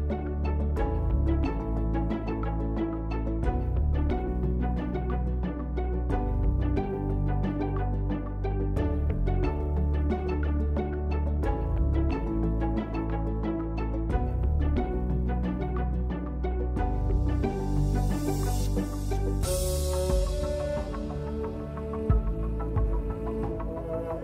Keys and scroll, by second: 1.9-3.0 typing, 2.2 Return, 2.5 Return, 3.0 Return, 4.6 KP_1, 4.6 KP_2, 4.6 KP_0, 4.7 Return, 6.1 ctrl+a, 7.4 KP_3, 8.3 shift+s, 9.2 shift+s, 10.4 Caps_Lock, 11.5-13.6 typing, 12.0 Return, 12.1 Tab, 15.5 Tab, 16.1 Tab, 16.2-17.2 typing, 17.5 Tab, 18.3-23.4 typing, 19.4 Tab, 24.0 ctrl+z.